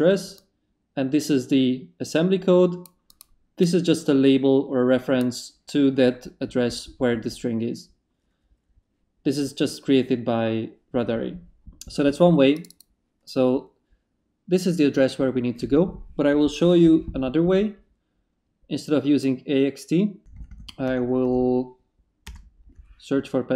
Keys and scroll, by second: 20.3 Up, 22.2 Return.